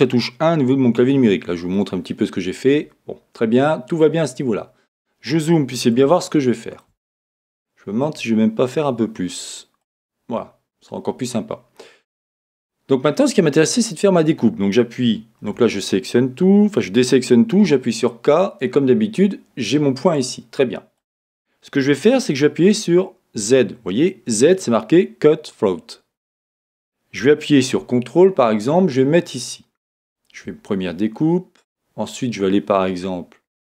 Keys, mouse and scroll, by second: 7.7-9.8 shift+middle drag, 9.8 click, 15.4 a.